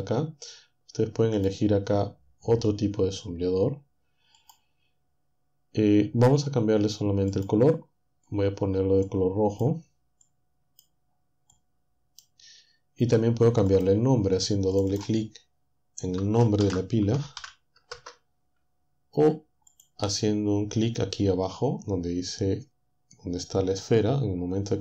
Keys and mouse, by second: 1.4 click, 4.4 click, 7.3 click, 9.0 click, 10.2 click, 11.5 click, 13.7 click, 14.8-16.4 drag, 16.6-17.9 typing.